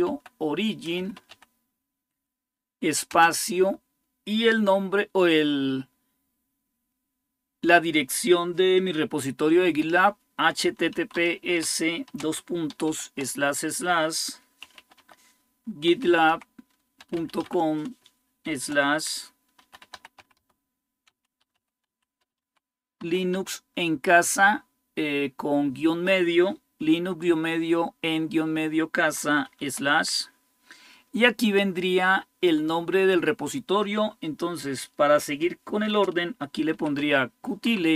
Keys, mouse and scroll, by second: 0.0-1.6 typing, 2.9 typing, 9.6-12.7 typing, 14.2-23.1 typing, 35.6-37.4 typing.